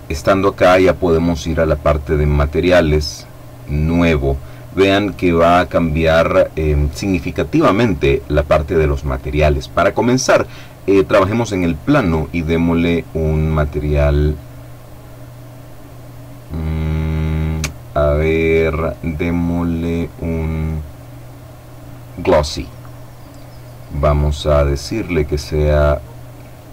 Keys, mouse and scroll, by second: 1.1-2.1 middle drag, 2.4 click, 3.5 click, 13.2 click, 22.3 click, 23.8 click, 26.3 click.